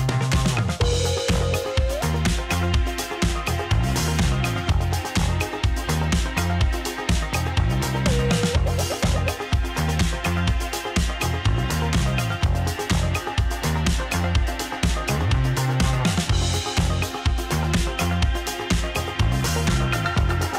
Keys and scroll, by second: 7.7-8.7 typing, 11.8-12.7 typing.